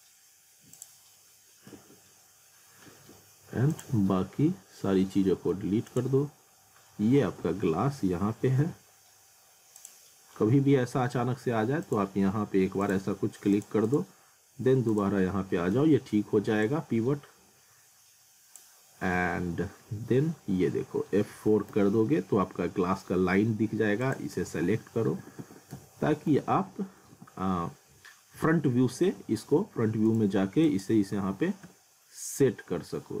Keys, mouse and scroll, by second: 1.3-1.9 scroll up 1, 3.7 click, 5.1 middle click, 5.9 click, 6.4-7.4 scroll down 1, 7.4 w, 9.8 click, 15.6 middle click, 16.6 click, 19.2 F3, 19.8 F4, 20.7 scroll up 1, 21.7 z, 22.4 alt+middle click, 24.0 ctrl+click, 24.6 alt+q, 25.2 alt+w, 25.7 z, 26.4 w, 27.1 w, 28.3-30.1 typing, 30.1 click, 31.6 r.